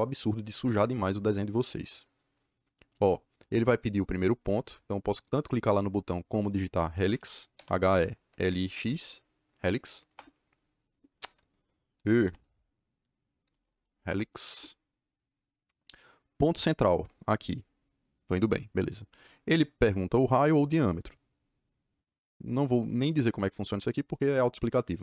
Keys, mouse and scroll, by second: 6.7 Escape, 6.9 Escape, 7.2-9.2 typing, 10.0 Return, 11.1 Escape, 11.9-14.0 typing, 17.0 click.